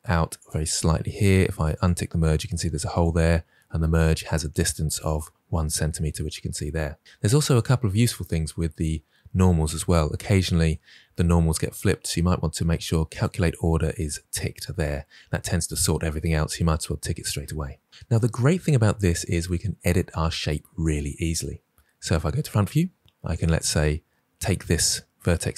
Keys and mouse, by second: 0.3 click, 1.7 click, 2.9 click, 7.5 click, 13.0 click, 21.9 KP_1, 23.2 click.